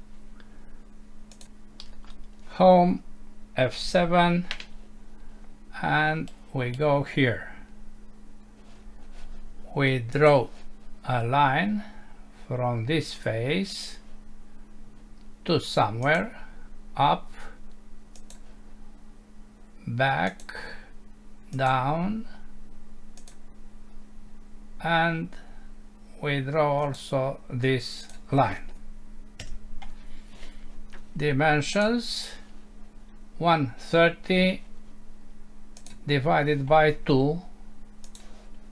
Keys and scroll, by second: 1.8 Home, 3.7 F7, 29.4 Escape.